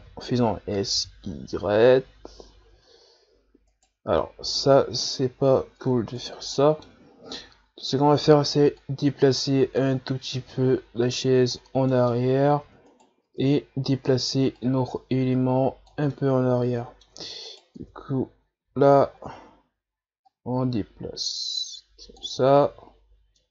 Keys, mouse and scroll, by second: 0.0 s, 4.3-5.0 scroll down 2, 5.0-5.3 scroll down 3, 5.3-5.8 scroll up 4, 5.8 Tab, 6.4 right click, 6.6 middle click, 7.4 Tab, 7.8 a, 8.1 a, 8.8-11.8 drag, 11.9 middle click, 12.3-12.6 scroll up 2, 12.6 Tab, 12.9 right click, 13.2 Tab, 13.8 a, 14.1 a, 14.6-16.1 drag, 16.1-17.1 middle drag, 17.1 Tab, 17.5 right click, 17.8 Tab, 18.2 a, 18.6 a, 19.1-19.9 scroll up 2, 20.3-22.4 drag, 22.4 Tab, 22.6 a, 22.9-23.2 scroll down 2, 23.4-23.5 middle drag.